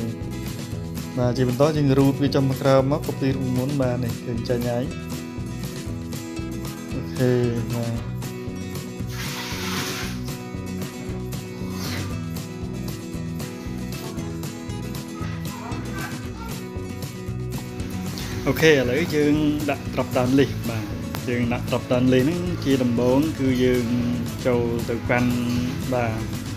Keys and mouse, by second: 0.6 click, 1.5-3.2 drag, 4.4 click, 6.0-7.0 drag, 8.2-9.8 drag, 10.5-11.8 drag, 12.8-14.3 drag, 17.3 click, 18.6-19.2 drag, 19.5 click.